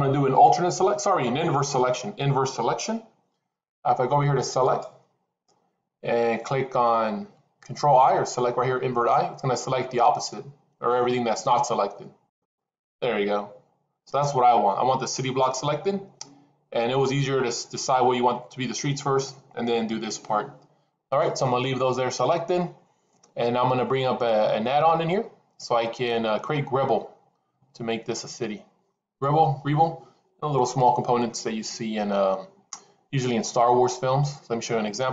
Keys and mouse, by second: 4.5-12.4 drag.